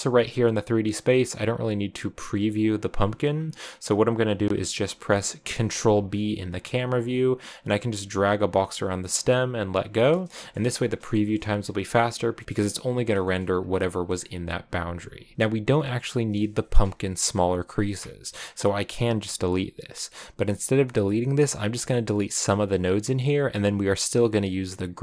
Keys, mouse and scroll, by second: 1.1 click, 2.0 right click, 2.9 scroll up 2, 3.6 click, 4.2 click, 4.8 click, 5.7 ctrl+b, 10.1 shift+middle click, 10.3-10.9 scroll up 3, 10.9 shift+middle click, 11.2-12.4 scroll down 1, 12.4 shift+middle click, 13.4-14.1 scroll down 1, 15.3 scroll down 1, 17.8 middle click, 24.0-25.0 drag.